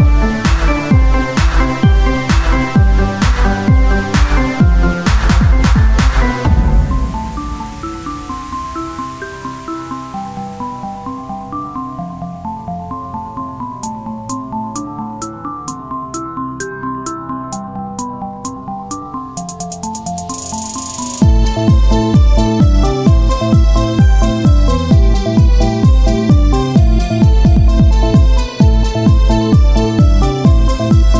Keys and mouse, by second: 1.3 KP_7, 1.7 z, 2.1 c, 4.0-5.7 drag, 5.1 c, 6.0 z, 8.3 z, 9.6 c, 11.2-12.2 drag, 12.2 KP_1, 13.8 b, 15.2 x, 16.2 Tab, 16.9-18.6 drag, 18.6 Tab, 19.8-21.0 drag, 20.6 z, 21.6-25.4 drag, 27.5-30.1 drag, 27.5-30.1 right drag, 30.1 z, 30.5-31.1 right drag.